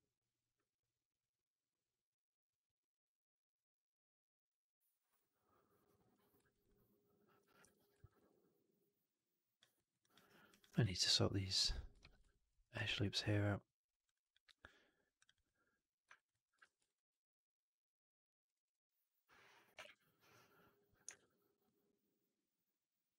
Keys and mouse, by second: 6.4 alt+right click, 6.5 alt+click, 7.8 4, 7.9 alt+right click, 8.1-9.4 alt+drag, 9.6 alt+right click, 9.9 alt+click, 10.1 alt+right click, 10.4 alt+click, 11.0 2, 11.9 shift+x, 12.2 alt+click, 12.5 alt+middle click, 12.6 alt+right click, 15.2 click, 16.0 alt+right click, 16.2 alt+click, 16.5 shift+x, 16.7 right click, 18.3 click, 18.5 click, 20.0 ctrl+BackSpace, 21.0 shift+f, 21.8-23.1 drag.